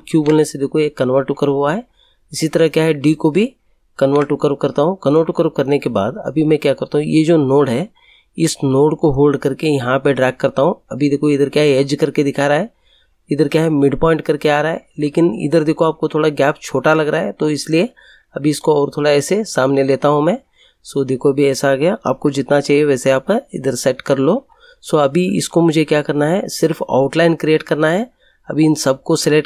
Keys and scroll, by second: 0.0 ctrl+q, 3.9 ctrl+q, 22.2 Right, 24.4 Right.